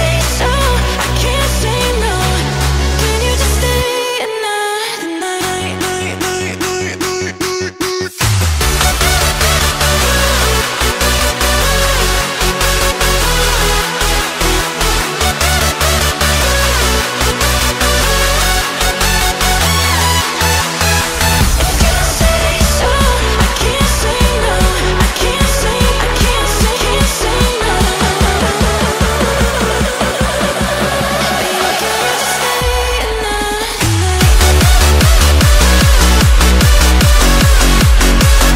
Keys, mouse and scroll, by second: 0.4 s, 1.6 middle click, 2.1 Tab, 2.4 KP_1, 3.3-4.3 middle drag, 4.3 Tab, 5.3 click, 5.8 s, 8.2 ctrl+z, 8.6 ctrl+z, 10.6 s, 11.9 middle click, 12.3 Tab, 12.7 KP_1, 13.2-14.0 scroll up 1, 14.0 s, 17.8 click, 18.4 click, 19.6 click, 20.6-21.2 shift+middle drag, 21.2 click, 22.6 shift+a, 24.0 s, 26.8 KP_7, 27.3-27.9 shift+middle drag, 27.9 g, 29.2-29.7 shift+middle drag, 29.7 s, 35.9 shift+middle click, 36.3 Tab, 36.5-36.8 scroll up 1, 36.8-37.9 shift+middle drag, 37.9 ctrl+r.